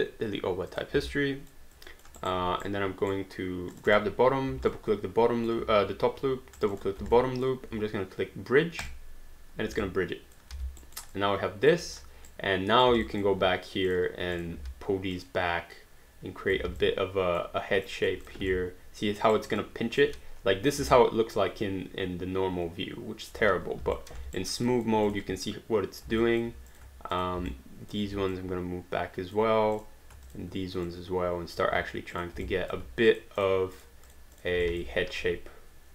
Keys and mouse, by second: 0.7 click, 1.2 alt+click, 2.2 alt+right click, 2.6 right click, 3.8 click, 4.8 alt+click, 6.6 shift+click, 7.2 alt+click, 8.8 click, 9.8 alt+click, 10.5 alt+d, 10.8 alt+right click, 11.2 alt+click, 11.9 click, 12.3 right click, 13.1 alt+click, 13.9 click, 14.4 shift+click, 14.6 w, 15.1 click, 16.5 alt+click, 16.7 alt+d, 16.8 alt+click, 18.0 alt+click, 18.2 click, 18.5 alt+click, 19.3 alt+right click, 19.6 alt+click, 20.9 alt+click, 24.0 alt+click, 24.4 alt+right click, 24.7 alt+click, 25.1 click, 25.5 right click, 26.2 alt+click, 26.7 click, 27.1 shift+click, 27.9 alt+click, 28.4 click, 29.8 click, 30.3 shift+click, 30.9 click, 31.7 q, 32.1 click, 32.5 alt+click, 33.1 shift+click, 34.8 alt+click, 35.0 click, 35.1-35.9 typing.